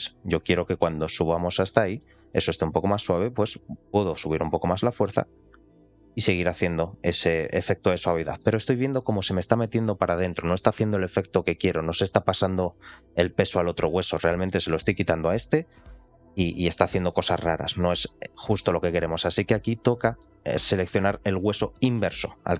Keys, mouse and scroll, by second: 1.9 middle click, 3.8 click, 4.5 click, 5.7 middle click, 6.2 click, 8.3 middle click, 18.6 ctrl+z, 19.5-19.9 scroll down 2, 19.9 shift+middle click.